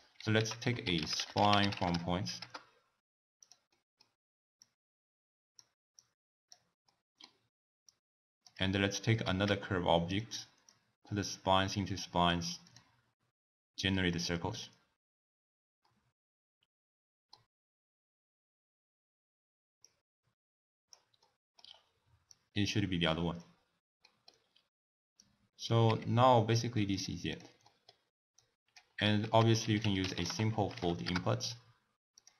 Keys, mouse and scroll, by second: 0.4 ctrl+a, 3.7-4.6 middle drag, 4.6 drag, 5.9 click, 6.9-7.9 middle drag, 7.9 click, 8.9 click, 9.4 shift+d, 10.7 drag, 12.6 click, 14.5 click, 15.8-18.8 middle drag, 19.8-21.2 drag, 21.2-22.2 middle drag, 22.2 click, 24.0 middle click, 24.4-25.2 scroll down 2, 25.2 drag, 25.8 g, 27.3 click, 27.7-28.4 middle drag, 28.4 drag, 29.2 ctrl+a.